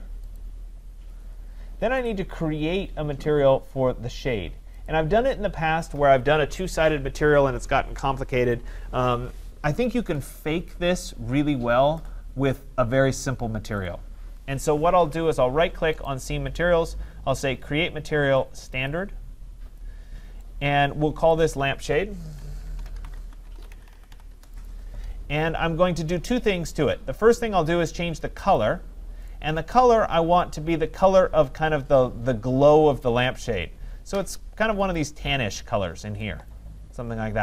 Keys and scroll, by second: 24.3 Return.